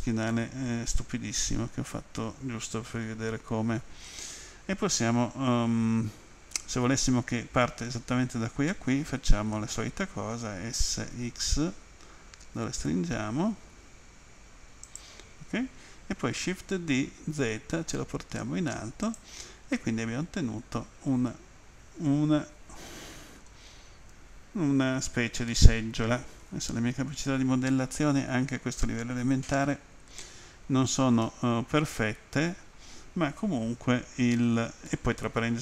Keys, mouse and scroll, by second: 1.0 middle click, 10.9 typing, 14.9 click, 16.7 d, 17.4 z, 19.1 click, 19.8 middle click, 24.3-25.5 scroll down 2, 25.7 middle click, 27.8 scroll down 1, 30.5-31.3 scroll down 2, 31.3 middle click, 34.9 middle click.